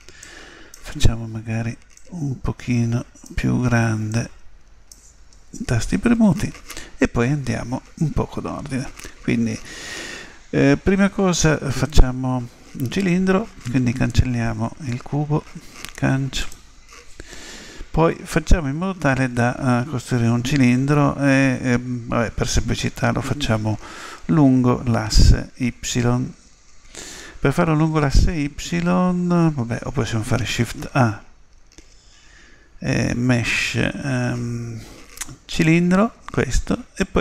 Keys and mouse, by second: 2.3-5.9 drag, 15.7 Delete, 30.4 shift+a.